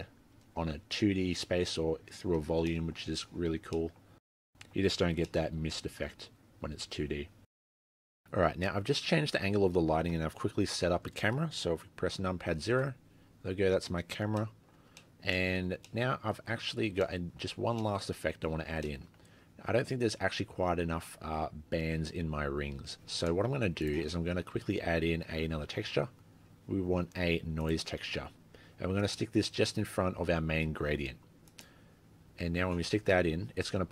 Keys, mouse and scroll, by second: 0.1 scroll up 2, 1.5 scroll up 2, 2.7 middle click, 3.1-3.8 scroll down 7, 3.7-5.3 scroll up 7, 3.8 middle click, 4.3 middle click, 5.3 shift+middle click, 8.7-9.2 shift+scroll down 1.